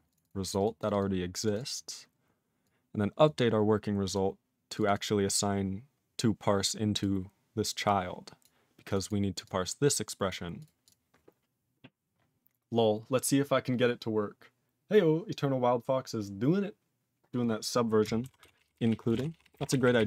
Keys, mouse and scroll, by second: 0.1 click, 0.1 click, 0.2 double click, 0.3 double click, 0.5 click, 0.5 click, 0.6 double click, 0.6 double click, 0.8 click, 0.9 click, 1.0 double click, 1.0 double click, 1.4 click, 1.4 click, 1.5 double click, 1.6 double click, 2.6 click, 3.3 click, 4.1 click, 4.1 click, 4.8 click, 4.8 click, 4.9 double click, 5.0 double click, 6.9 click, 7.0 click, 7.9 click, 8.4 click, 8.9 click, 8.9 click, 9.0 double click, 9.1 double click, 9.4 click, 10.3 click, 10.6 click, 10.6 click, 10.8 click, 10.9 click, 18.4 ctrl+s, 18.6 ctrl+p, 18.7 ctrl+p, 18.9 ctrl+e, 19.1 ctrl+space, 19.1 ctrl+a, 19.2 ctrl+p, 19.3 ctrl+p, 19.5 ctrl+p, 19.6 ctrl+g, 19.6 ctrl+e, 19.7 ctrl+n, 19.8 ctrl+n, 20.0 ctrl+n.